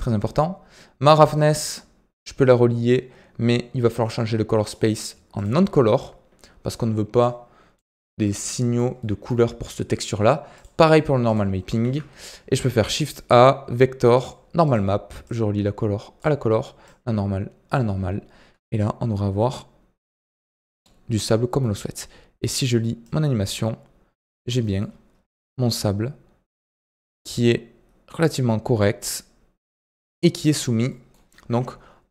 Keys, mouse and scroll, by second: 4.6-7.2 drag, 8.2 click, 8.9-9.6 middle drag, 9.6-11.8 drag, 11.8 shift+a, 15.2-16.8 drag, 20.2-20.6 scroll up 4, 20.6-23.1 middle drag, 23.1-24.6 drag, 24.6 middle drag, 24.7-25.3 scroll up 8, 25.3-28.3 middle drag, 28.9 scroll down 5, 29.1-30.6 middle drag, 30.6 scroll down 3, 30.8-32.1 middle drag.